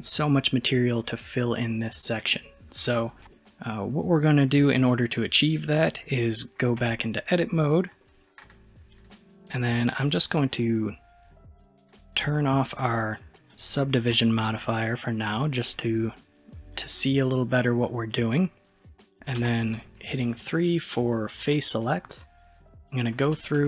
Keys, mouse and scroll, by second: 2.3-3.5 middle drag, 6.9 Tab, 7.4-13.4 middle drag, 13.5 click, 15.7-17.8 middle drag, 19.4 3, 21.5 click, 22.1-23.6 middle drag.